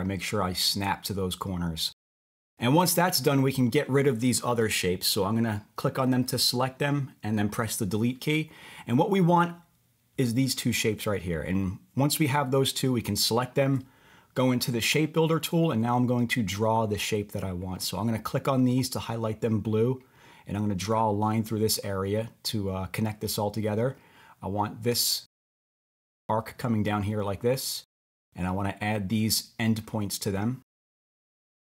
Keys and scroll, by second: 4.6 BackSpace, 5.9 Delete, 7.5 Delete.